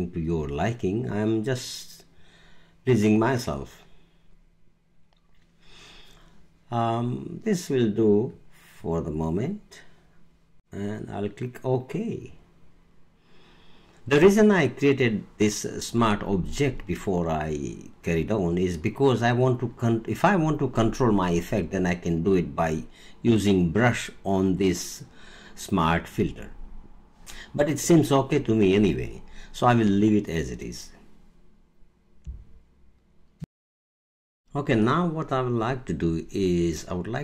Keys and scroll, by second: 33.4 alt+space.